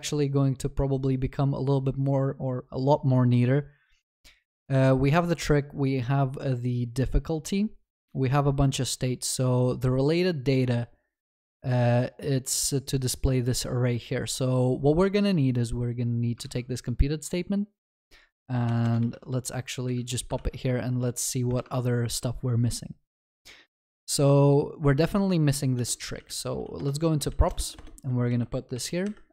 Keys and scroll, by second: 19.0 ctrl+v, 19.9 ctrl+alt+shift+l, 26.8 Return.